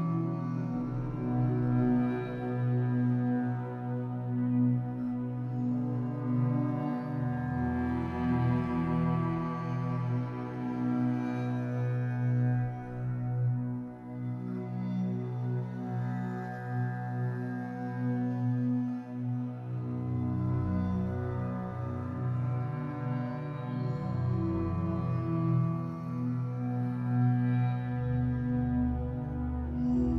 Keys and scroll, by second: 0.7 ctrl+a, 8.1 Escape, 8.8 2, 9.6 alt+c, 11.9 Escape, 14.4 3, 19.9 2, 20.7 alt+c, 22.3 ctrl+z, 23.7 Escape, 24.0 2, 24.6 2, 26.0 alt+c.